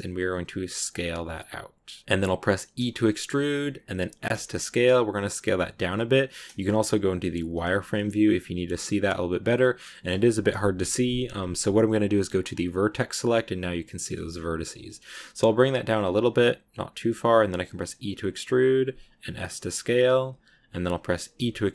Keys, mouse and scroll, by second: 2.0-2.6 scroll up 3, 2.6 e, 9.4-10.4 middle drag, 10.4 KP_1, 12.5 click, 14.0 shift+middle click, 14.2 scroll up 1, 14.5 s.